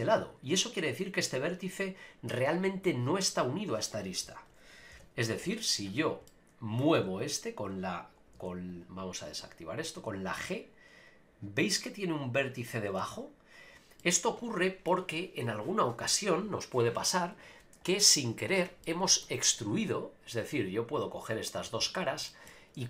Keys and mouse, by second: 4.9 KP_Decimal, 6.3 middle click, 7.0 g, 8.0 right click, 8.3 g, 8.7 right click, 9.4 click, 9.9 g, 12.6 right click, 13.0 g, 13.6 right click, 14.0 middle click, 18.8 middle click, 21.0 click, 21.5 click, 22.3 shift+middle click.